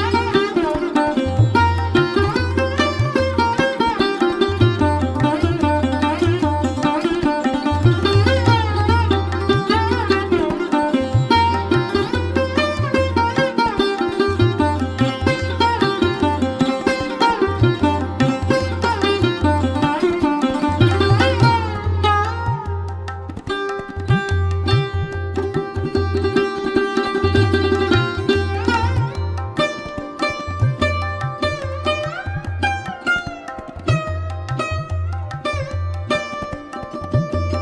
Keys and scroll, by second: 6.8 space, 9.8 ctrl+z, 13.0 space, 31.3 space, 37.1 space.